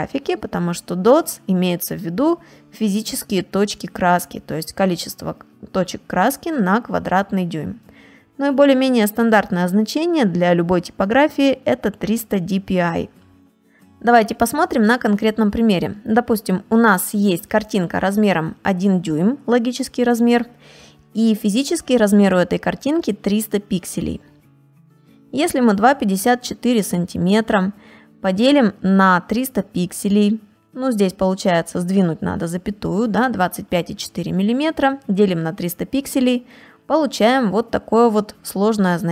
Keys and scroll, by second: 7.4 space, 12.8 space, 14.8 space, 15.9 space, 24.0 ctrl+space, 24.4 ctrl+space.